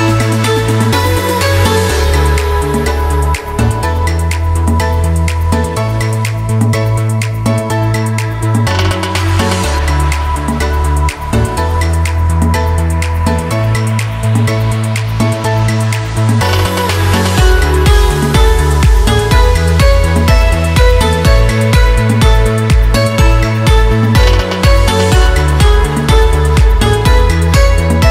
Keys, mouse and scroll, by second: 0.1 t, 1.0 click, 1.6 Return, 2.4 click, 3.5 scroll down 1, 4.9 scroll up 1, 5.6 space, 5.7 click, 6.0 space, 7.8 click, 9.7-13.4 ctrl+drag, 13.4 Return, 15.1-16.9 drag, 17.7 ctrl+t, 18.3-21.8 drag, 22.5 scroll up 1, 23.3 click, 24.4 click, 26.8 alt+click.